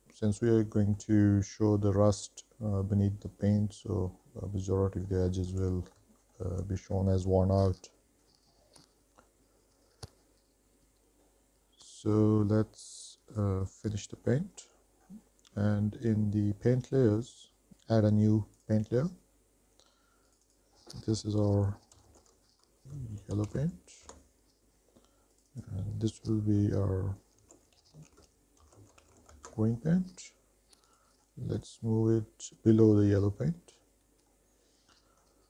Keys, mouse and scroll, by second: 0.4 middle click, 3.8 middle click, 5.1 middle click, 5.5 shift+middle click, 5.9 middle click, 6.4 shift+middle click, 7.0 middle click, 13.5 click, 14.3 middle click, 14.7 shift+middle drag, 15.2-16.6 scroll up 2, 18.7 click, 20.6-22.8 drag, 22.8 l, 25.7-29.5 drag, 28.2 e, 31.1 click, 31.7 click.